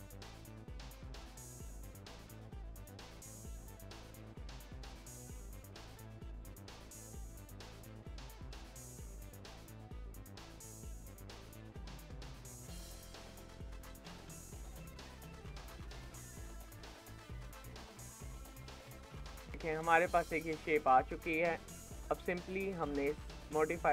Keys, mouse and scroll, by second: 0.3 ctrl+shift+b, 1.3 scroll down 1, 1.4 shift+middle click, 1.7 click, 2.1 ctrl+shift+b, 3.0 scroll down 3, 3.1 shift+middle click, 3.5 scroll up 1, 3.6 click, 4.5 ctrl+shift+b, 6.6 click, 7.3 ctrl+shift+b, 8.4 click, 8.7 shift+middle click, 9.0 click, 9.3 ctrl+shift+b, 10.3 click, 10.6 ctrl+shift+b, 13.2 shift+middle click, 13.5 click, 14.1 ctrl+shift+b, 15.1 shift+middle click, 15.4 click, 15.9 ctrl+shift+b, 17.4 shift+middle click, 17.8 scroll down 4, 18.1 shift+middle click, 19.1 Tab, 19.2 scroll down 2, 19.4-22.8 shift+middle drag, 22.8-23.9 drag.